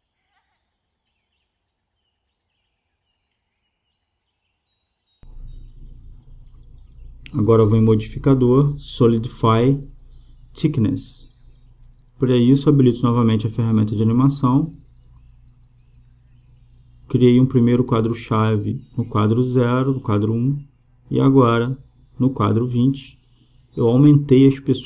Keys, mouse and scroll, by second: 5.5-7.5 middle drag, 7.5-9.1 drag, 12.1-13.9 drag, 15.9 i, 17.5-19.2 drag, 19.7-21.5 drag.